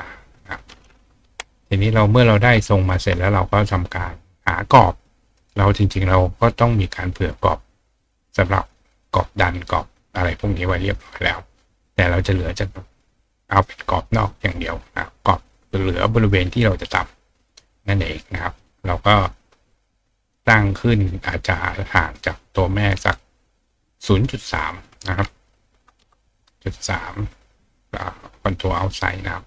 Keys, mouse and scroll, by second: 1.6 click, 2.2 click, 2.6 ctrl+right click, 8.9 click, 9.6 click, 11.7 click, 18.6-20.3 drag, 23.8 click, 27.6 click.